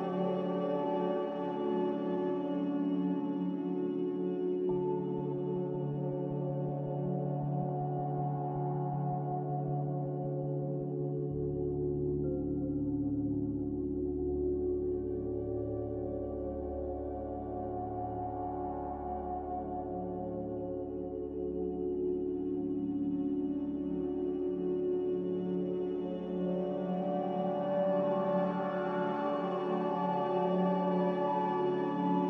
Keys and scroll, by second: 5.1 ctrl+c, 19.0 m, 22.1 b, 26.3 n.